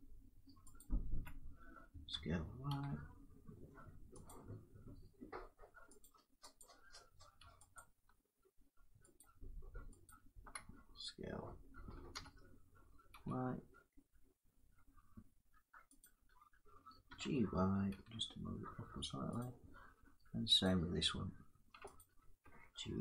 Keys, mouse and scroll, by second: 0.5 click, 1.8-2.4 typing, 4.0 click, 5.7 click, 6.0 s, 6.4 click, 7.4 alt+click, 7.5 alt+click, 8.9 click, 9.8 click, 11.8 s, 12.8 s, 15.8 click, 16.8 g, 19.0 y, 19.2 click, 20.3 click, 21.2 g, 21.7 alt+click, 22.8 g.